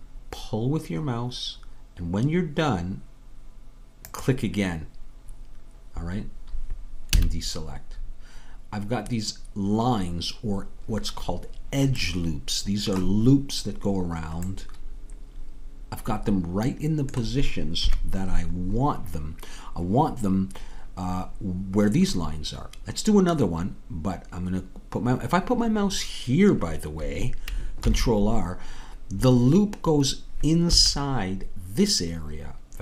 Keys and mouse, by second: 7.2 a, 17.8 KP_3, 27.9 ctrl+r.